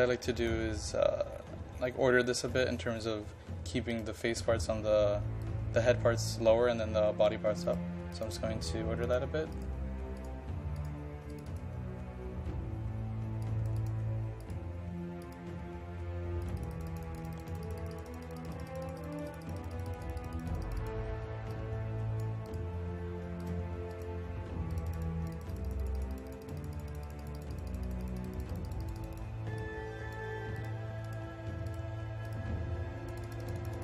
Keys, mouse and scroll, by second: 1.3-2.0 scroll down 1, 2.2-3.9 scroll up 1, 3.9-33.8 drag.